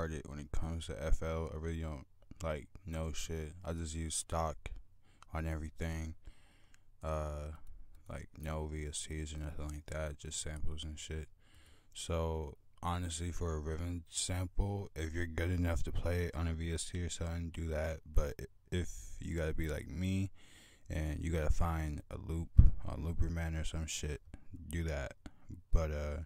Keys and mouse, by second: 4.4 F1, 4.4 click, 5.7-6.0 drag, 6.4-10.3 drag, 10.5 click, 11.9 F1, 11.9 click.